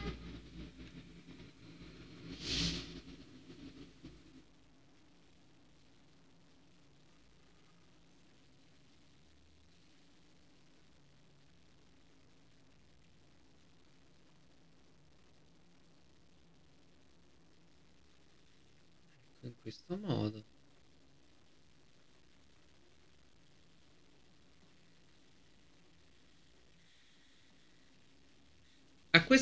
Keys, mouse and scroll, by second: 1.3 right click, 2.0-12.2 drag, 13.0 alt+scroll up 1, 14.2 right click, 15.2-24.4 drag, 24.4 scroll down 1, 25.1-26.8 drag, 26.9 alt+scroll down 1.